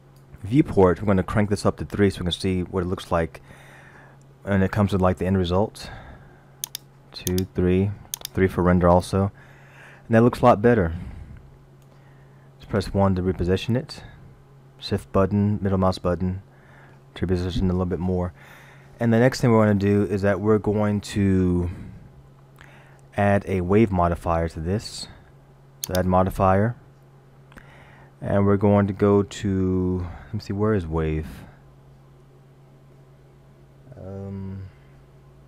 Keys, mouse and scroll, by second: 6.7 click, 7.3 click, 8.2 click, 9.6 middle click, 12.8 KP_1, 15.0 shift+middle click, 25.9 click.